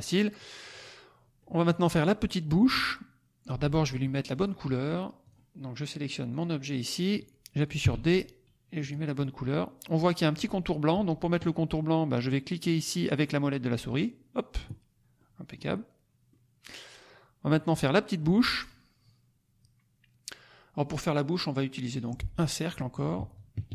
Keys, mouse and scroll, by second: 0.6 click, 1.4 middle click, 1.8-2.4 scroll up 1, 2.7 click, 4.0 click, 5.2 click, 6.2 click, 7.8 d, 8.7 click, 14.0 middle click, 15.1 click, 16.2 click, 17.5 middle click, 18.1 middle click, 21.9 click, 22.9-23.7 drag.